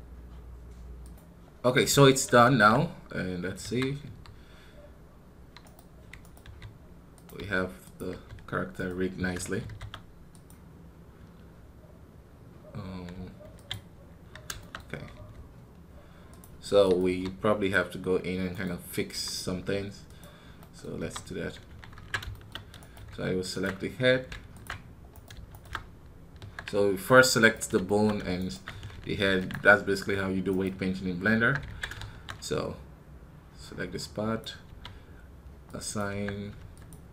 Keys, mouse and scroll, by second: 1.7-3.5 middle drag, 3.5 KP_1, 14.5 shift+middle click, 14.7 scroll up 1, 20.4 middle click, 20.9 KP_3, 21.1 scroll up 1, 22.2-26.3 shift+middle drag, 27.3 right click, 27.7-30.0 shift+middle drag, 30.0-30.6 scroll up 1, 30.9 scroll up 1, 31.3 Tab.